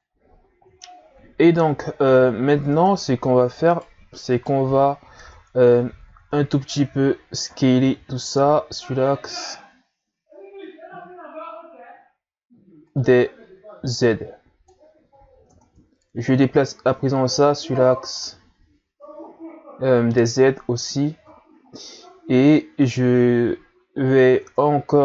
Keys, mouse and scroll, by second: 2.2-3.2 scroll up 1, 3.2-3.7 scroll up 1, 3.7 right click, 4.3 right click, 4.9 scroll down 3, 5.2 Tab, 6.1 a, 6.3 a, 7.1 scroll up 1, 7.8 s, 14.0 click, 14.9 ctrl+z, 15.5 Tab, 16.2-18.5 drag, 18.5 scroll up 2, 21.9-23.2 scroll up 1, 24.4 Tab.